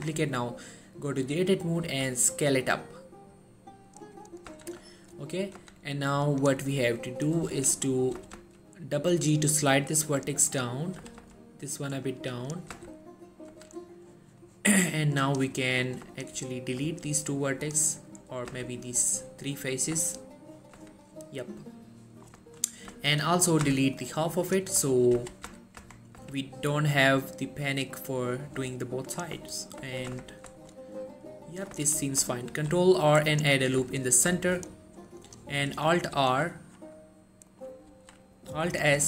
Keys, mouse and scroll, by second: 0.0 Tab, 2.0 s, 4.1 click, 4.6 z, 5.0 shift+middle click, 5.3-5.7 shift+scroll up 2, 5.7 z, 6.4 click, 8.3 g, 8.4 g, 10.2 click, 11.1 g, 11.3 g, 12.4 click, 12.8 z, 13.6 z, 15.3 click, 17.0 x, 17.8 click, 18.6 x, 20.1 z, 20.9 z, 21.3 scroll down 1, 21.4-22.6 middle drag, 23.0-23.8 typing, 24.1-24.7 click, 25.3-26.3 typing, 25.9 Tab, 28.0 click, 29.6 scroll up 2, 30.2 Tab, 30.7-31.9 shift+middle drag, 31.8 1, 32.6 ctrl+r, 33.4 click, 33.5 right click, 34.5 shift+middle click, 35.3 click, 35.6 scroll up 1, 36.3 alt+s, 37.6 right click, 38.0 alt+s, 38.8 right click.